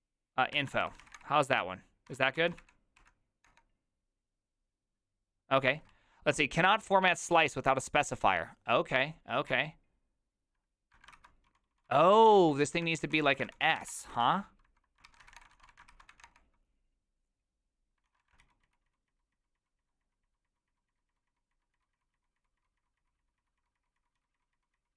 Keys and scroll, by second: 0.5-2.1 typing, 1.4 ctrl+a, 2.6 ctrl+c, 3.0 Up, 3.4 Return, 9.4 ctrl+a, 10.9-15.3 typing, 11.1 ctrl+c, 15.0 ctrl+c, 15.4 Return, 15.5 ctrl+shift+a, 15.9 ctrl+c, 16.1 Up, 16.2 Return, 18.0 ctrl+a, 18.2 [, 18.4 ctrl+u, 18.6 ctrl+u, 18.8 ctrl+u, 19.1 ctrl+u.